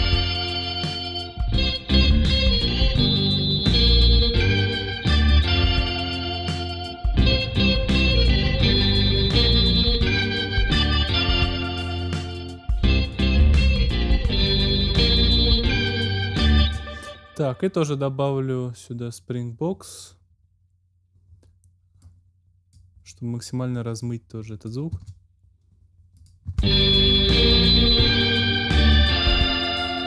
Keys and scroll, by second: 16.5 space, 24.9 space, 26.4 space.